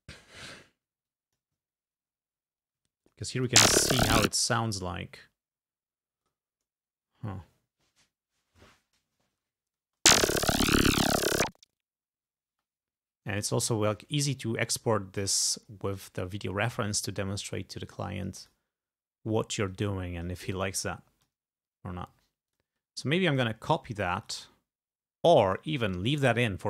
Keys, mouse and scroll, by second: 0.0-0.4 ctrl+scroll down 2, 0.5 ctrl+scroll up 2, 1.1 ctrl+click, 1.8-2.2 ctrl+scroll up 2, 3.1 ctrl+click, 3.4 ctrl+space, 3.8 ctrl+scroll down 2, 4.2 ctrl+space, 6.3 click, 6.6 scroll up 2, 9.9 space, 12.6 space, 13.1 scroll down 2, 13.8 ctrl+scroll down 2, 14.7-15.9 drag, 16.5-18.7 drag, 18.9 scroll down 2, 19.7 click, 20.6 click, 21.5-22.4 scroll up 4, 22.5 click, 22.8 click, 23.6 scroll down 2, 24.2 click, 25.0 scroll up 2.